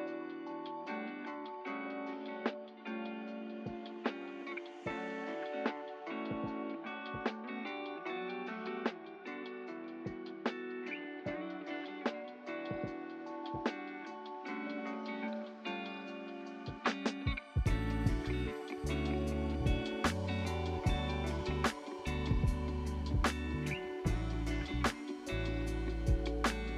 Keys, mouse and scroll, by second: 2.7 click, 4.1-4.4 scroll up 3, 4.7-5.1 scroll down 1, 5.1-5.5 scroll up 1, 5.5-7.3 shift+middle drag, 7.3-8.0 scroll down 3, 8.0 middle click, 8.5 scroll down 2, 9.1 scroll up 1, 10.5 click, 10.7 click, 12.0 Tab, 13.0 click, 15.1 l, 16.1 l, 17.8 Delete, 18.1 middle click, 19.0 Tab, 19.9 click, 20.9-22.1 middle drag, 22.1 click, 23.5 click, 24.9-26.7 middle drag.